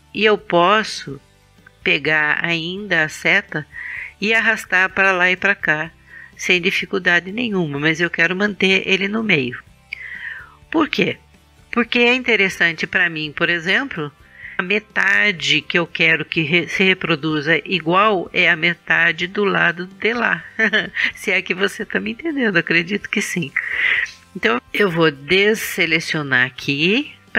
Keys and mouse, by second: 14.6 KP_1, 26.3 a.